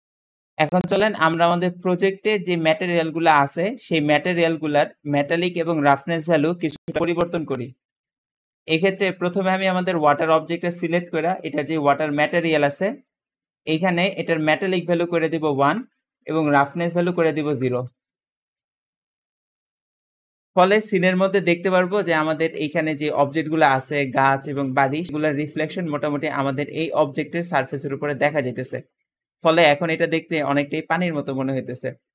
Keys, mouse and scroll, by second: 12.8-14.0 scroll down 11, 14.5-19.7 drag, 15.2-15.6 typing, 15.5 Return, 17.1 Return, 17.1 1, 17.3 KP_0, 17.5 0, 17.6 Return, 21.4 `, 22.8 click, 25.8 click.